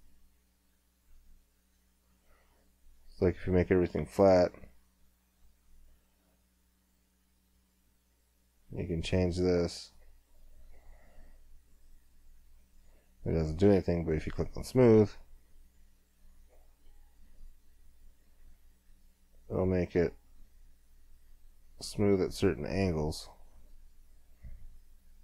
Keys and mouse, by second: 3.7-7.6 drag, 14.2-17.7 drag.